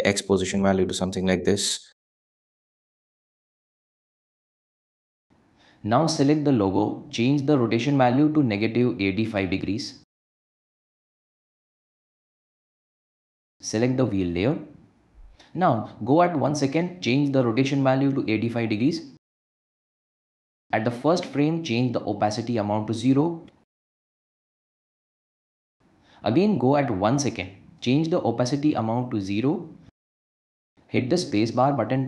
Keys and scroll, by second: 9.8 -, 10.1 8, 10.3 5, 11.1 Return, 18.0 8, 18.3 5, 18.8 Return, 24.0 0, 24.5 Home, 29.2 0, 29.5 Home, 31.3 space.